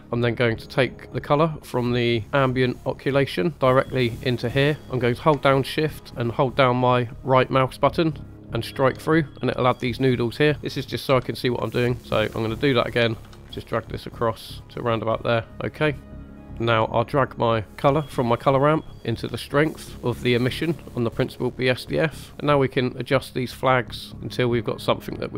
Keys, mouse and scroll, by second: 0.0 scroll down 3, 1.0 click, 2.1 click, 2.2 middle click, 2.2 scroll up 1, 3.5-4.8 drag, 7.9 shift+right click, 11.0 g, 12.5 shift+right click, 13.4 g, 15.5 scroll down 2, 15.5 middle click, 16.0 click, 16.0 scroll up 3, 16.4 middle click, 16.5 scroll up 2, 16.9 middle click, 17.8 click, 18.1-20.5 drag, 22.3 middle click, 23.5 click, 24.3-25.3 drag.